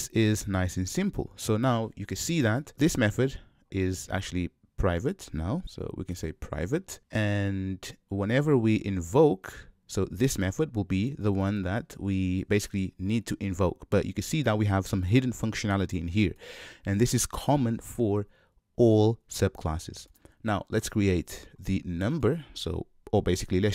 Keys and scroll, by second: 6.2 Return.